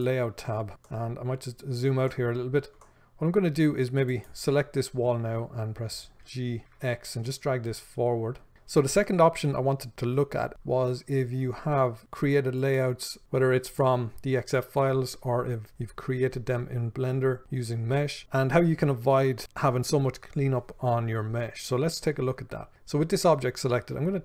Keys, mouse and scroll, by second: 0.0-1.1 drag, 1.1-4.5 ctrl+middle drag, 4.5 click, 6.5 g, 8.5 click.